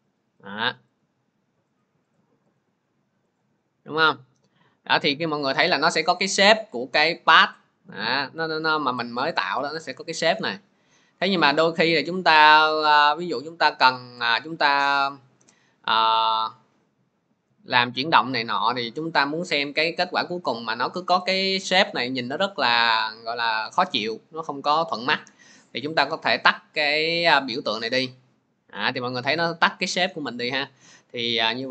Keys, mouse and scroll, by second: 0.4 click, 0.9 click, 2.0 click, 2.4 click, 3.2 click, 5.3-5.7 scroll, 9.2-9.7 scroll, 11.1-11.7 scroll, 12.2 scroll, 15.5 click, 27.7 click.